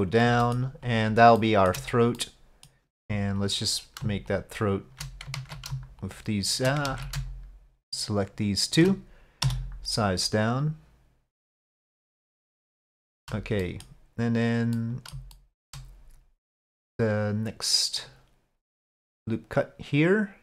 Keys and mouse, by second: 1.5 shift+middle click, 2.2 middle click, 3.5 alt+click, 4.4 alt+shift+click, 5.4 ctrl+z, 6.1 alt+shift+click, 7.2 ctrl+alt+shift+z, 8.4 alt+shift+click, 9.5 s, 13.1 shift+click, 13.7 click, 14.8 click, 15.4 shift+middle click, 18.1 click, 19.2-20.4 drag.